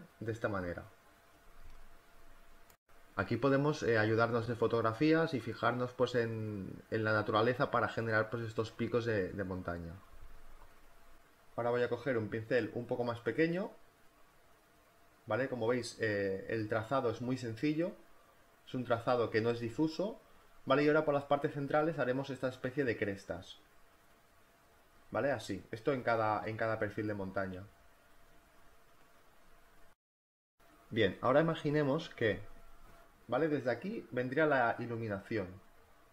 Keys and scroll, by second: 2.0 ctrl+z, 5.2 ctrl+z, 10.0 space, 14.5 4, 16.6 BackSpace, 17.0 5, 24.1 e, 24.7 b.